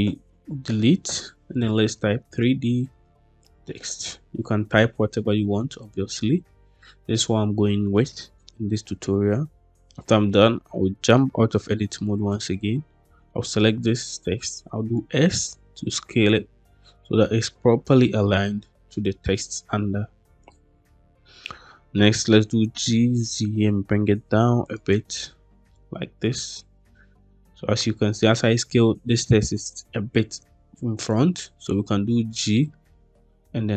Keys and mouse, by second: 0.0-3.7 typing, 5.9 Tab, 9.1 Tab, 12.3-14.6 drag, 14.6 s, 20.3 click, 22.2 g, 22.9 z, 24.5 click, 25.1-28.2 middle drag, 30.9-31.2 middle drag, 32.2 g.